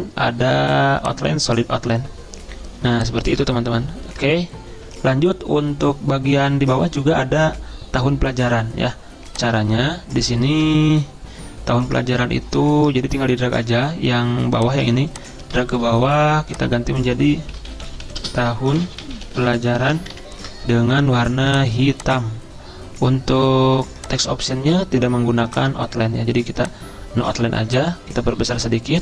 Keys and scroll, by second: 17.6-19.3 typing, 20.2 ctrl+shift+Up, 20.5 typing.